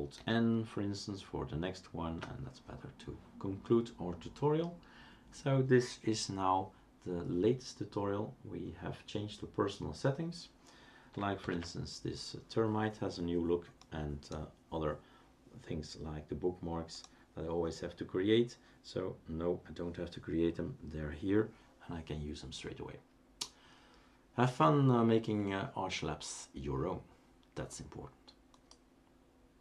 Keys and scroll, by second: 0.2 alt+n, 11.4 ctrl+alt+t.